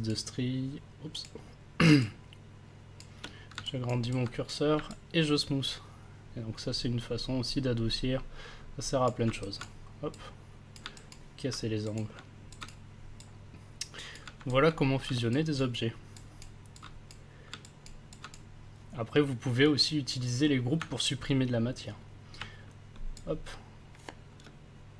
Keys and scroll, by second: 22.9 ctrl+s, 24.4 ctrl+shift+space.